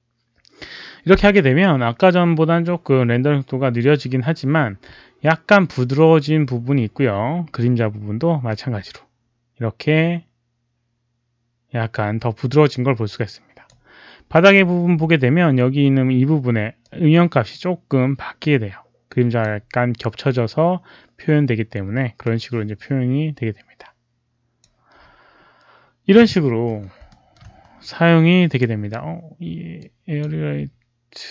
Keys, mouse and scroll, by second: 8.4-13.6 drag, 16.7-19.3 drag, 22.1-24.6 drag, 27.0 alt+middle click, 28.4 click, 29.7 click.